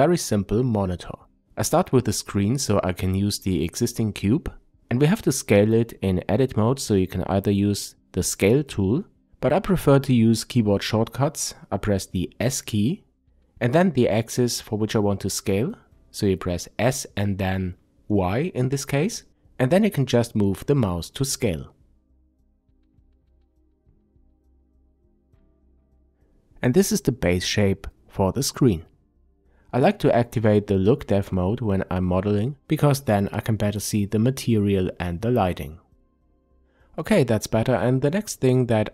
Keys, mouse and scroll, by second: 3.9-19.6 drag, 12.9 s, 20.7-25.1 middle drag, 25.1 click, 30.5 click, 32.4-37.3 drag, 38.3 shift+click, 38.6-38.9 middle drag.